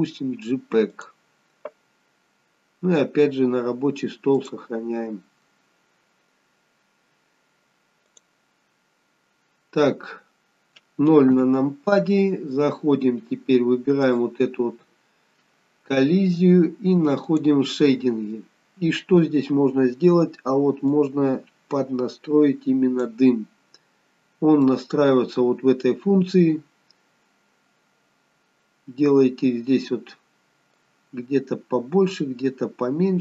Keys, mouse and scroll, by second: 23.6 middle click, 23.6 scroll up 1.